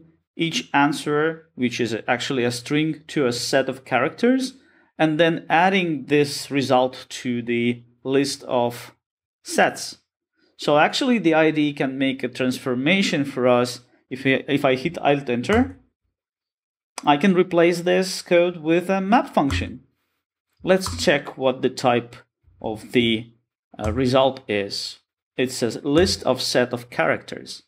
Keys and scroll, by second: 5.7 Return, 16.9 alt+Return, 24.0 alt+Return.